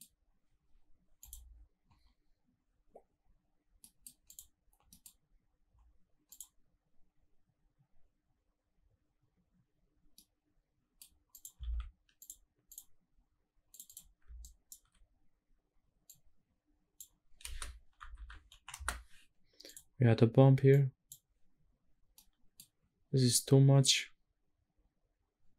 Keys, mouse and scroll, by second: 1.2-2.7 scroll down 1, 2.7 click, 2.7-3.5 scroll down 1, 3.5 middle click, 3.9 click, 5.2-6.7 scroll down 1, 6.7 click, 6.7 middle click, 6.7-9.9 scroll down 1, 9.9 middle click, 11.0 click, 11.4 shift+d, 12.4 click, 14.1 alt+right drag, 15.7 scroll up 1, 15.8-16.7 drag, 17.1 space, 20.4 click, 21.2 scroll up 2, 21.5 scroll down 1, 21.8-22.2 middle drag, 23.6-24.1 scroll up 1.